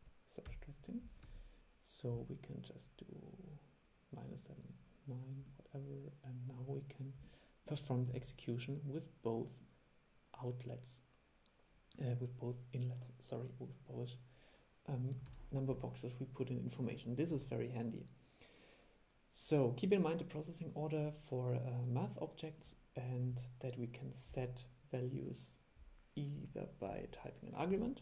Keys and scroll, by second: 1.4 super+e, 15.4 super+e.